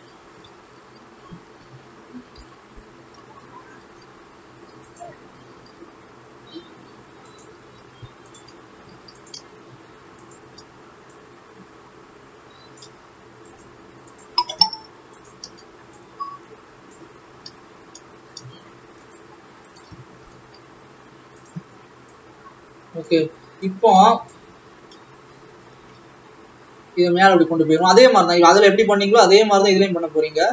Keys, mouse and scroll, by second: 0.5 ctrl+z, 2.2 s, 4.0 s, 5.4 a, 6.0 s, 7.8 alt+a, 8.5 alt+click, 8.9 alt+a, 9.3 click, 10.4 shift+click, 14.3 shift+click, 17.2-18.1 scroll up 1, 18.1-18.6 scroll down 1, 20.2 s, 22.2 click, 23.8-25.7 drag, 25.7 g, 28.1-29.0 scroll down 1, 29.0 e.